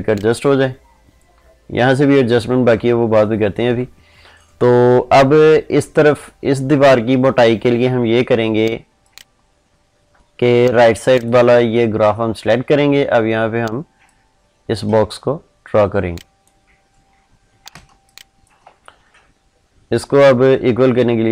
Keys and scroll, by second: 17.6 ctrl+space.